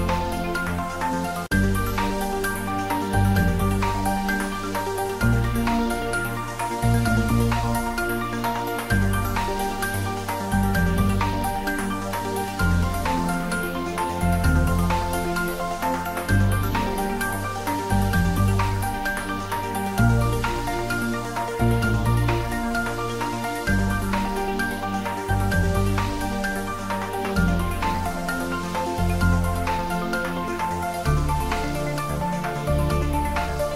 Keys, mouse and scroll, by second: 3.3 click, 3.7 e, 4.5 click, 10.5 click, 10.8 e, 13.1 click, 13.6-14.3 typing, 14.9 click, 16.2 s, 16.7 click, 16.9 ctrl+z, 17.4 click, 18.0 ctrl+z, 22.7 click, 23.2 e, 24.1 click, 24.6 i, 27.1 click, 28.1 ctrl+middle click, 29.2 e, 30.7 click, 31.2 ctrl+middle click, 31.8 Tab, 32.2 ctrl+middle click, 32.9-33.7 ctrl+middle drag.